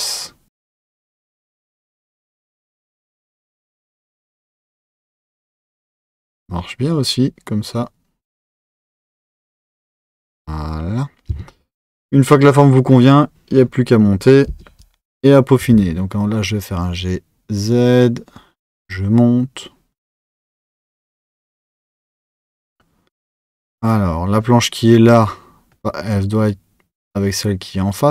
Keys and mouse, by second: 11.3 Tab.